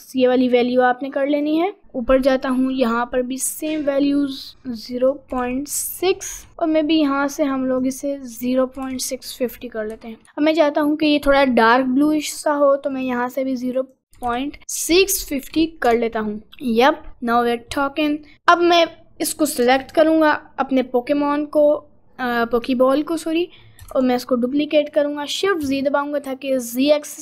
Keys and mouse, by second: 1.3 click, 17.3 middle click, 17.9 middle click, 18.4 click, 19.9 ctrl+click, 22.6 click, 24.0 shift+d.